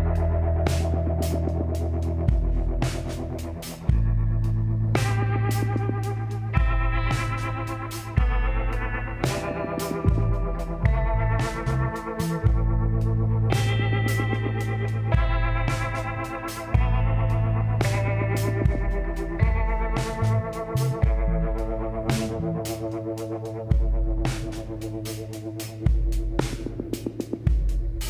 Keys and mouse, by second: 0.4 click, 4.3 KP_7, 5.6-7.4 drag, 6.0 z, 7.7 a, 8.4-12.5 drag, 13.5 middle click, 13.8 click, 14.7 g, 16.4-18.1 drag, 16.8 g, 19.7 middle click, 20.7-27.0 drag, 25.9 right click, 27.0 l.